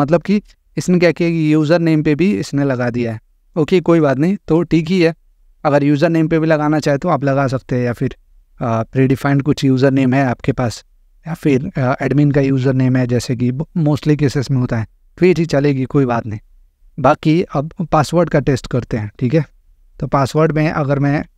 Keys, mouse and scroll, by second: 1.6 click, 3.8 click, 16.4 click, 20.4 click.